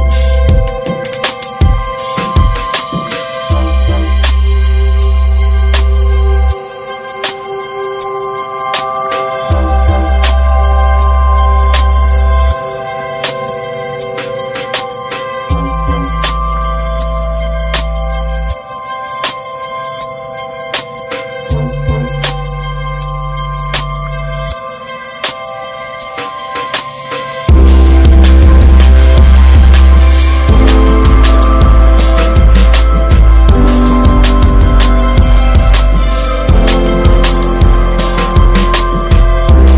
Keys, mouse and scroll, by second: 2.4 middle click, 3.0 scroll up 1, 3.2 middle click, 3.9 ctrl+r, 4.6 middle click, 5.2 ctrl+b, 7.2 middle click, 8.1-9.3 right drag, 9.3-11.0 middle drag, 11.0 e, 12.5 Tab, 12.5 drag, 12.9 middle click, 13.2 scroll up 1, 13.4 click, 13.5 scroll down 2, 14.1 ctrl+1, 14.5 drag, 14.7 scroll down 3, 14.9 middle click, 15.2 ctrl+2, 15.7 click, 15.9 scroll down 3, 16.2-16.6 middle drag, 16.6 scroll up 1, 16.9-18.0 shift+middle drag, 18.0 ctrl+2, 18.4 middle drag, 18.5-19.0 scroll up 2, 19.2-19.7 scroll up 3, 19.5 shift+middle click, 20.0 Tab, 20.6 shift+middle click, 20.7 scroll up 2, 21.0 middle click, 21.7 ctrl+r, 23.3 middle click, 23.8 alt+z, 24.3-25.5 middle drag, 25.5 alt+z, 25.9 click, 26.4 /, 27.1 /, 28.1 l, 29.1 click, 29.9 middle click, 30.8 3, 30.9 click, 31.7 x, 32.3 Tab, 32.6 click, 33.3 Tab, 34.1 alt+middle click, 35.2 click, 36.6 alt+z, 36.9 Tab, 37.0 click, 37.2 scroll down 2, 37.6 alt+z, 38.0-38.3 shift+middle drag, 38.3 scroll up 1, 38.6 Tab, 38.7 middle click, 38.9-39.3 scroll up 2, 39.1 shift+middle click, 39.6 middle click.